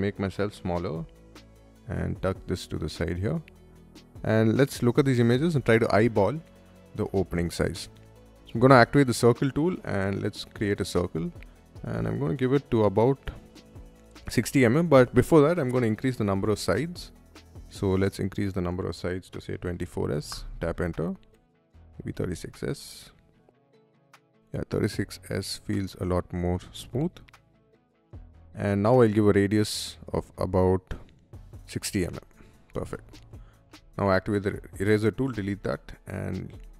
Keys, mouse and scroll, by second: 0.6-2.5 right drag, 3.8 scroll down 1, 4.7-5.2 scroll up 1, 5.2-5.6 scroll down 1, 7.5 middle click, 8.0 shift+middle click, 9.7 shift+click, 15.2 scroll up 1, 16.2-17.6 scroll down 1, 18.9-20.1 typing, 21.3-22.4 typing, 24.1 middle click, 24.2 middle click, 25.9 middle click, 31.1-32.4 typing, 32.7 middle click, 33.6 e, 33.8 click, 34.4 middle click, 35.0 space, 35.3 click, 35.9 o, 36.3 p, 36.6 click.